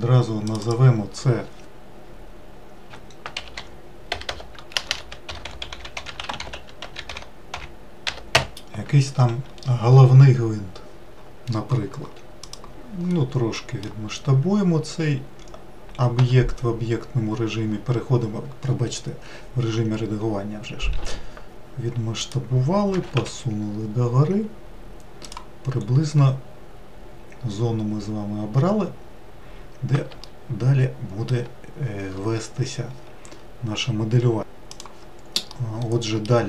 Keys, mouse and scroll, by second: 0.1 click, 0.3-3.4 drag, 3.9 BackSpace, 13.4-16.1 middle drag, 16.1 Tab, 20.8 s, 22.8 g, 25.9-26.6 scroll up 1, 26.6-28.6 scroll up 1, 29.0-30.0 scroll up 1, 30.1-33.2 shift+middle drag, 35.2-36.4 middle drag.